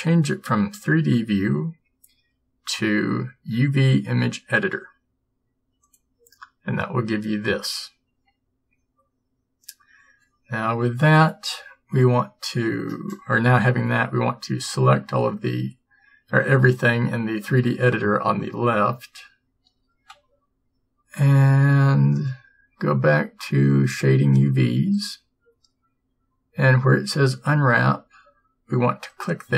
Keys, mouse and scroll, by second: 6.6-11.9 drag, 20.2 a.